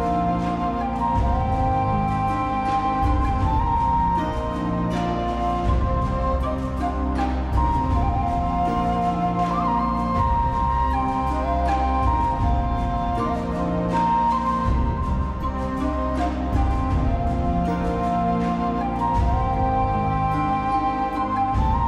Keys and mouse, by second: 0.1 middle click, 0.3 middle click, 1.1 middle click, 2.0 middle click, 2.4 middle click, 3.0 g, 3.7 shift+z, 4.1 click, 4.3 click, 4.8 g, 5.0 shift+z, 5.7 click, 5.8-7.4 middle drag, 7.5 middle click, 7.7 shift+middle click, 8.0 middle click, 8.8 middle click, 9.1 shift+click, 9.2 middle click, 9.4 g, 9.6 click, 9.8 click, 9.9 g, 10.1 click, 10.3 g, 10.5 click, 10.8 click, 11.1 g, 11.4 click, 11.5 middle click, 12.0 click, 12.1 middle click, 12.3 g, 12.6 click, 12.7 middle click, 13.9 3, 14.0 middle click, 14.7 middle click, 14.9 alt+middle click, 15.1 alt+middle click, 15.5 1, 15.8 alt+z, 15.8 shift+middle click, 16.1 click, 16.2 middle click, 16.2 g, 16.6 click, 16.9 click, 17.2 click, 17.3 g, 17.8 click, 18.1 alt+z, 18.1 middle click, 18.4 3, 18.6 middle click, 19.1 middle click, 19.4 alt+middle click, 19.5 alt+middle click, 19.7 e, 20.2 click, 20.4 middle click, 20.9 ctrl+z, 20.9 middle click.